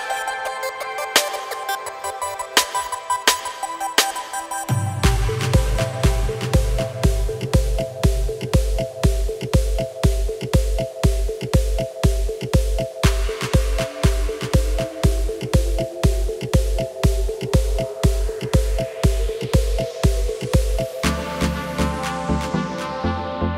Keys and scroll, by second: 4.1 shift+e, 11.2 Tab, 13.7 Tab.